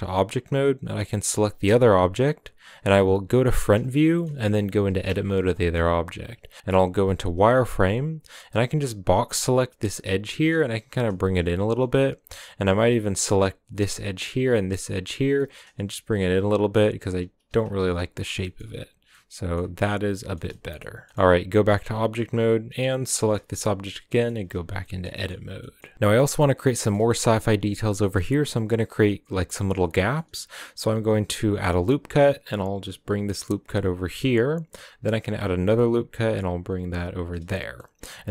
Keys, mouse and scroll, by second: 0.5-3.1 right drag, 3.1 KP_1, 4.0-6.6 shift+middle drag, 4.2 scroll up 1, 4.4 Tab, 6.6 z, 9.4 b, 10.1 g, 13.6 b, 15.0 b, 15.3 g, 16.4-18.9 typing, 19.1 middle click, 19.5 scroll down 2, 19.8-21.5 middle drag, 21.5 Tab, 21.8 a, 21.9 scroll up 2, 22.6 right click, 22.7 scroll down 1, 22.9-23.6 shift+middle drag, 23.6 Tab, 24.0 middle drag, 24.3 a, 24.8 scroll up 1, 24.8-25.3 middle drag, 25.3 scroll up 2, 25.6 shift+middle click, 26.2-26.7 scroll up 2, 26.7 shift+middle drag, 26.9-29.9 scroll up 2, 29.9 scroll down 1, 30.1-31.1 middle drag, 31.1 ctrl+r, 34.9 ctrl+r, 37.4-37.8 shift+middle drag, 37.8-38.3 scroll up 2.